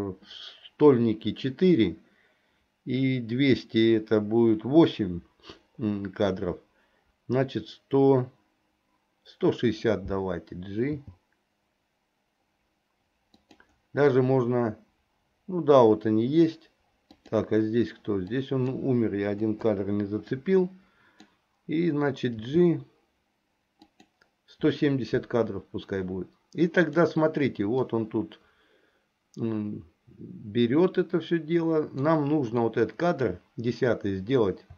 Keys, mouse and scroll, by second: 10.9 g, 17.3 click, 18.3 click, 19.5 Delete, 20.3 click, 22.5 g, 26.9 click, 27.9-32.2 drag, 32.7 click.